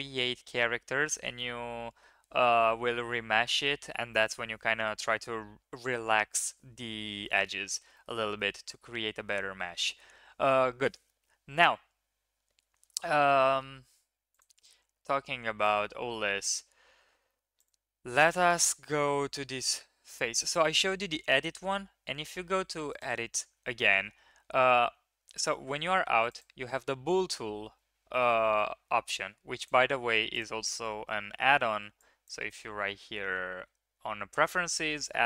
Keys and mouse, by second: 6.0 KP_1, 7.5 drag, 7.9 shift+click, 8.3 click, 9.6 ctrl+KP_3, 13.4 shift+drag, 17.5 click, 18.1 Tab, 22.9 click, 24.8 Tab, 26.2 click, 29.7-30.5 drag.